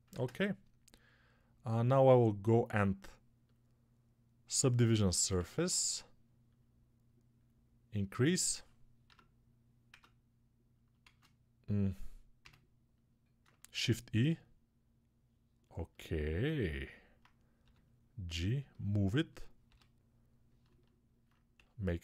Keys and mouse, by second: 0.0 ctrl+space, 0.0-3.1 ctrl+drag, 3.1-4.9 middle drag, 4.9-9.8 alt+shift+drag, 8.9 Tab, 9.8 Tab, 10.9 shift+a, 13.6 shift+e, 15.6-22.0 alt+middle drag, 17.5 g, 19.5 g, 21.4 s.